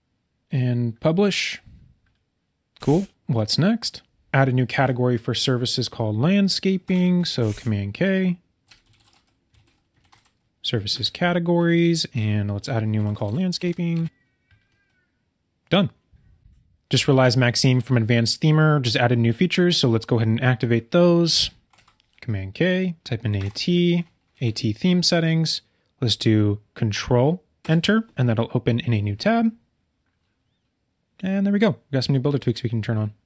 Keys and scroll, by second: 7.4 super+k, 8.7 BackSpace, 21.7 super+k, 24.3 Down, 27.6 super+Return.